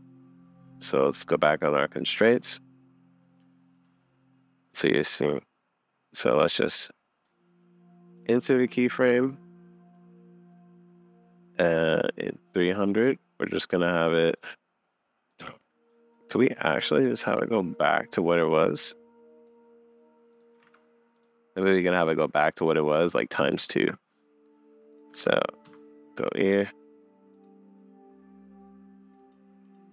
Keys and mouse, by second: 1.0 click, 3.7 click, 6.6-8.2 drag, 9.9 middle click, 16.8 click, 18.2-19.9 drag, 21.9 click, 23.6 shift+Right.